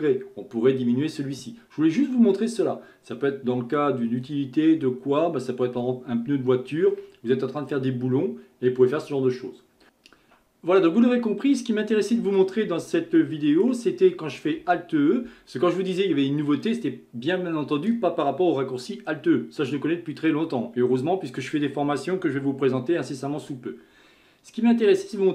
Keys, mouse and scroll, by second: 1.7-2.3 scroll down 2, 2.3-5.5 middle drag, 9.8 Tab, 11.1-12.8 middle drag, 12.8 Tab, 13.2-14.6 middle drag, 14.6 alt+e.